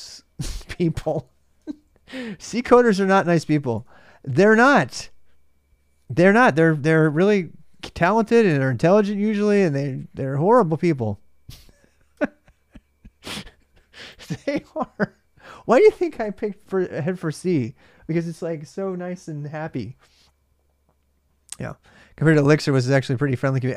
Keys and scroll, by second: 2.3-3.6 typing, 3.6 ctrl+a, 6.8-9.0 typing, 7.0 Return, 13.8-14.6 typing.